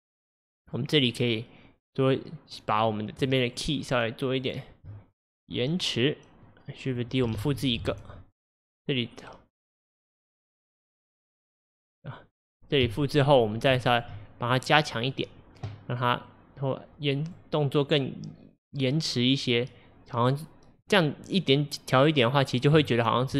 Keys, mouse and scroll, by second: 3.5 shift+click, 4.5 shift+click, 6.5-7.4 drag, 7.4 shift+d, 8.6-11.9 drag, 12.9 KP_1, 13.8-14.2 shift+middle drag, 14.2-14.6 scroll up 1, 14.6 drag, 15.2 click, 16.3 click, 18.7 click, 19.8 click, 22.9-23.3 shift+middle drag.